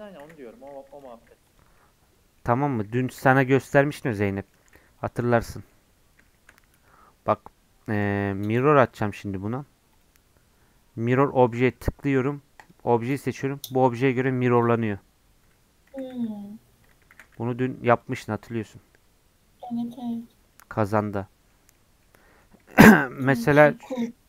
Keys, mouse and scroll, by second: 0.3 scroll up 2, 0.5 s, 1.0 g, 1.8-2.8 middle drag, 2.8 g, 4.2 middle click, 4.6 g, 5.2 shift+middle click, 5.7-6.3 scroll up 5, 6.3 shift+middle click, 6.5-7.3 scroll down 1, 7.3-15.9 drag, 15.9 g, 17.1 shift+d, 18.4 scroll down 4, 19.4 scroll up 6, 19.7 scroll down 7, 20.1 click, 20.4 scroll up 2, 20.5-21.5 middle drag, 21.5 scroll down 1, 21.7 middle click, 22.0 scroll up 1, 22.2 middle click, 23.2 click, 23.4-24.2 right drag.